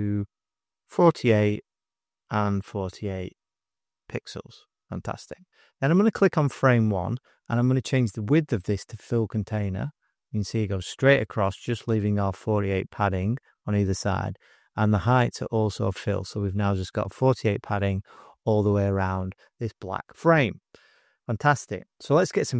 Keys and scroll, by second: 1.0-3.6 typing.